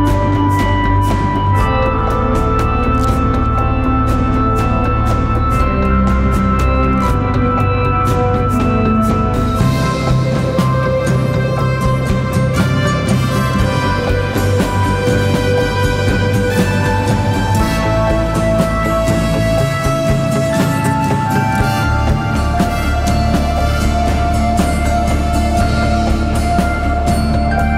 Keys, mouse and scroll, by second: 3.1 double click.